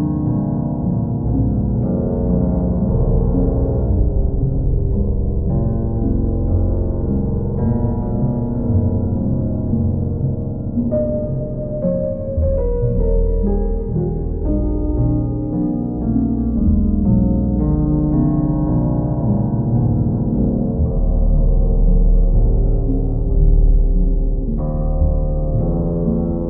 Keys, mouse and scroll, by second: 3.1 click, 5.7 click, 8.0 click, 8.3 ctrl+z, 10.8 ctrl+click, 11.6 ctrl+click, 12.1 w, 15.8 alt+click, 16.9 alt+click, 19.3 click, 19.6 ctrl+click, 20.4 ctrl+click, 20.9 ctrl+click, 24.4 click, 25.0 ctrl+click, 25.9 click, 26.2 click.